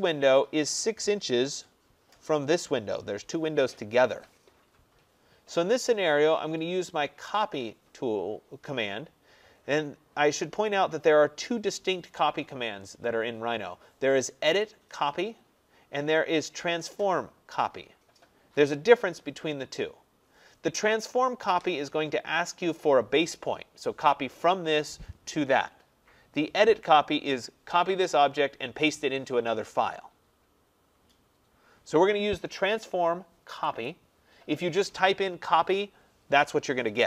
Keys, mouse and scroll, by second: 4.8 scroll, 4.9 middle click, 5.5 middle click, 5.6 middle click, 5.7 middle click, 14.7 click, 15.4-19.8 drag, 33.9-37.0 drag.